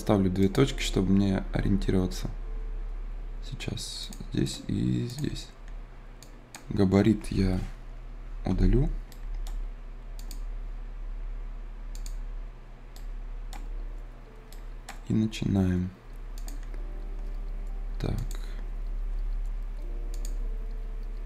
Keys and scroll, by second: 8.4 Delete.